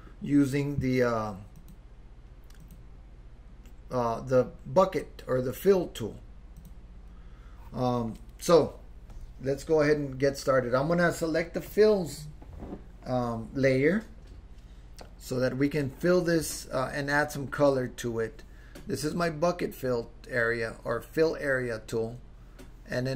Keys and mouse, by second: 1.6-2.8 drag, 6.6 click, 11.7 click.